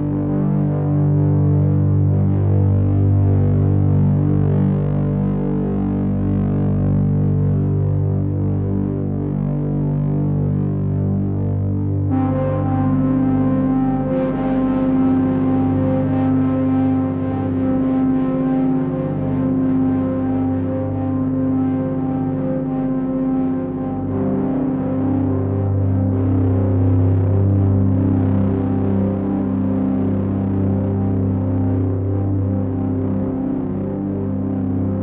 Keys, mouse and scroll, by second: 1.3 click, 1.9 click, 2.9 scroll down 1, 2.9-3.2 scroll up 1, 3.2-3.9 scroll down 2, 3.9 middle click, 8.6 click, 11.8 g, 28.5 middle click, 32.5 click.